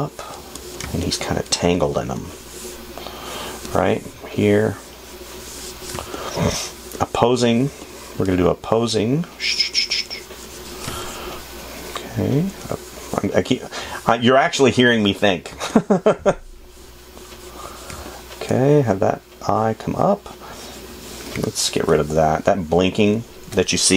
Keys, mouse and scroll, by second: 6.3 space, 11.2 space, 14.3 space, 15.9 space, 18.9 space, 21.6 f.